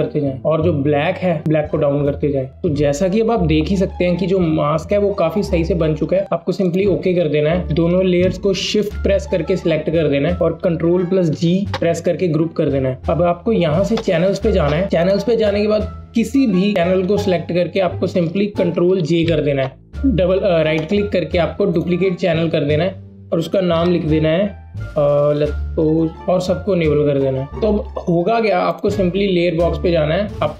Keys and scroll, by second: 11.1 ctrl+g, 18.8 ctrl+j, 26.1 typing.